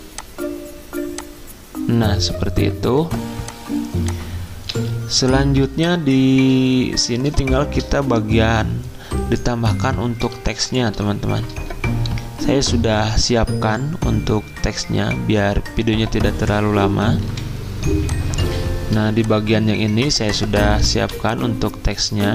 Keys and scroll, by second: 4.7 z, 17.2 F10, 20.9 v.